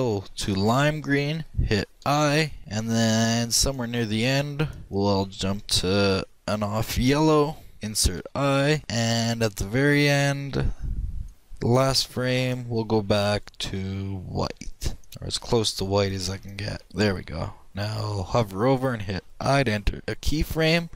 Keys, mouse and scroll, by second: 2.6-6.0 drag, 9.9-11.8 drag, 12.9-14.7 drag.